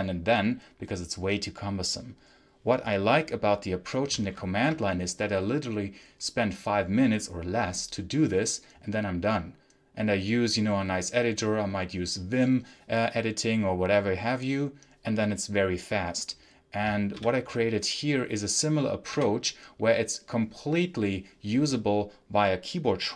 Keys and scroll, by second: 4.1 ctrl+super+h, 17.0 l, 19.0 t.